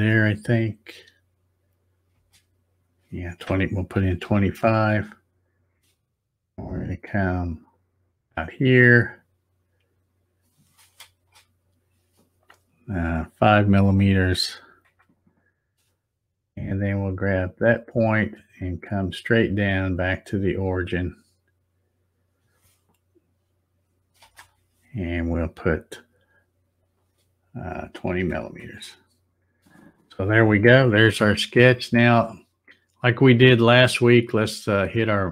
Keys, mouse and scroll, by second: 2.1 space, 7.7-11.6 drag, 11.1 space, 19.0-24.3 drag, 24.2 space, 34.9 click.